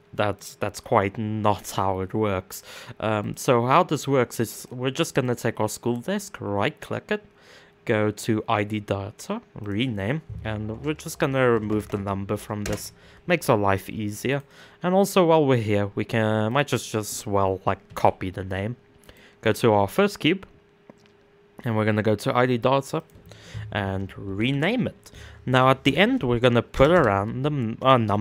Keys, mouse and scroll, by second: 0.0-2.9 middle drag, 2.9 click, 4.2 click, 4.8-7.8 right drag, 8.6-12.2 right drag, 12.2 BackSpace, 13.9 click, 14.0-18.6 right drag, 19.1 click, 19.4-28.2 right drag.